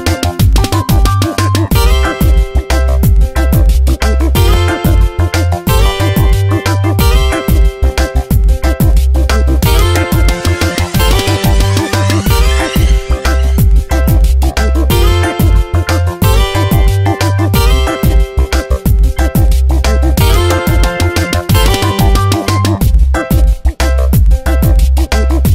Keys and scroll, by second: 1.2 Up, 3.1 ctrl+t, 4.9 Return, 5.3 space, 6.1 ctrl+t, 7.6 Return, 10.7 Up, 10.9 Right, 11.4 Down, 11.8 shift+Right, 12.3 Right, 12.9 Up, 14.0 Tab, 15.0 space, 17.6 ctrl+shift+], 18.3 shift+Left, 18.8 Down, 20.1 Up, 21.0 ctrl+t, 21.9 Return, 22.1 a, 23.3 shift+Up, 24.1 Return.